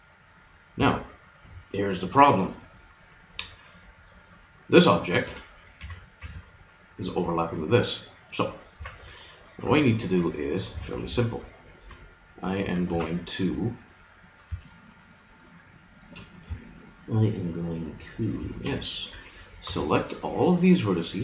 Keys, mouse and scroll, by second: 0.5 middle click, 1.7 KP_Divide, 3.0-5.3 right drag, 5.3 Tab, 5.8 Tab, 6.2 Tab, 8.8 Tab, 9.7 KP_3, 10.7 Tab, 12.9 z, 14.6-15.6 middle drag, 18.2-21.1 drag, 19.7 b.